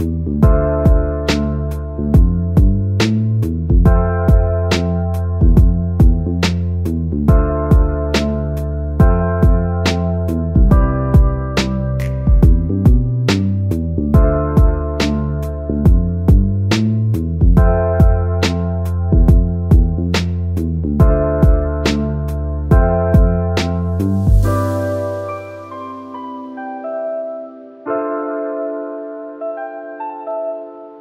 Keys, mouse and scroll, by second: 0.1-2.5 drag, 3.2-4.0 middle drag, 4.0 click, 4.9 Tab, 5.1-5.5 scroll up 3, 6.3 click, 11.0-12.0 scroll up 1, 12.0 middle click, 12.8 scroll up 1, 13.4 click, 14.5 shift+click, 15.6 shift+click, 16.7 click, 18.4 shift+click, 19.5 shift+click, 20.3 shift+click, 21.0 shift+click, 22.1 shift+click, 23.1 shift+click, 24.2 shift+click, 25.1 shift+click, 26.0 shift+click, 26.9 shift+click, 27.7 shift+click, 28.8 c.